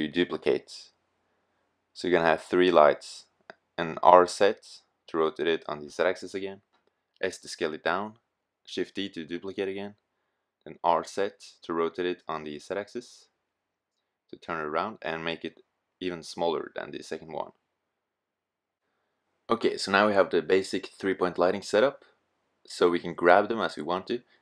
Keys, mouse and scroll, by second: 1.9-3.0 drag, 2.8 r, 3.3-3.7 drag, 5.0 s, 7.2 shift+d, 9.5-11.3 drag, 10.0 r, 13.9 s, 15.3-17.0 drag, 17.0 s, 23.8-24.4 right drag.